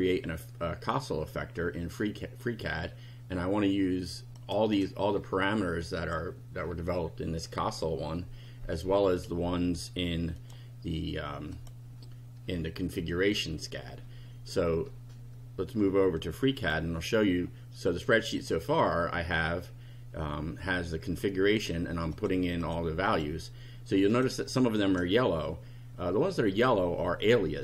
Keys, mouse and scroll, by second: 4.4 click, 4.7-6.3 drag, 10.4 click, 16.6 click, 18.2 click, 22.2 click, 22.6 click, 23.1 click, 24.1 click, 26.5 click.